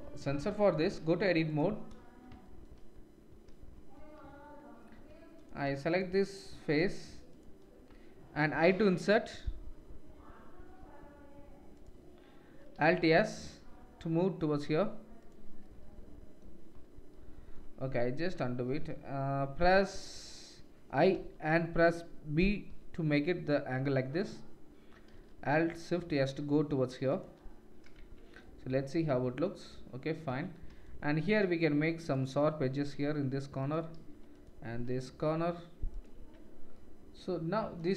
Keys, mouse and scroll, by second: 0.6 click, 0.8 Tab, 1.5 click, 2.5 shift+middle click, 4.9 3, 5.4 click, 5.6 shift+middle click, 5.9 shift+click, 6.3 shift+click, 6.7 shift+click, 7.0 shift+click, 12.8 alt+s, 15.8 middle click, 16.0 middle click, 17.8 ctrl+z, 18.2 ctrl+z, 25.1 alt+s, 28.0 Tab, 30.3 Tab, 31.6 ctrl+r, 34.0 ctrl+r, 36.2 Tab.